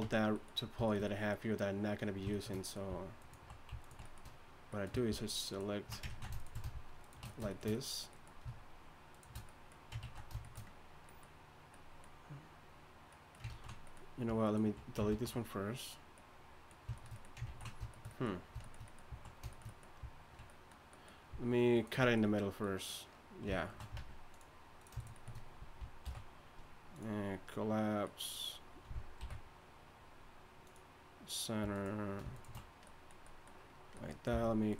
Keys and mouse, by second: 0.0 Tab, 6.1 ctrl+z, 10.0 ctrl+z, 13.5 ctrl+z, 15.1 ctrl+x, 17.5 ctrl+z, 24.0 ctrl+Tab, 26.0 alt+m, 29.2 alt+m, 31.7-34.7 drag, 34.3 v.